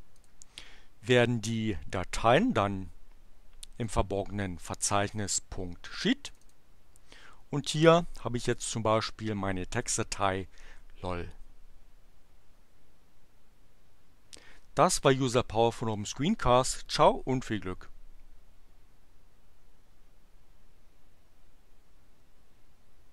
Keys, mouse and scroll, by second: 0.1 click, 3.7 click, 6.2 click, 9.8 click.